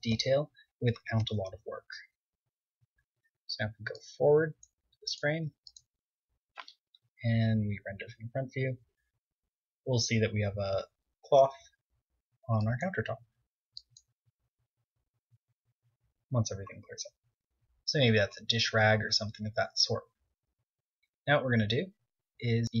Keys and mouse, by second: 0.0 Tab, 0.2 KP_1, 2.7 click, 4.5-5.9 drag, 6.0 KP_0, 11.8-13.1 middle drag, 21.6 z, 22.2-22.8 drag.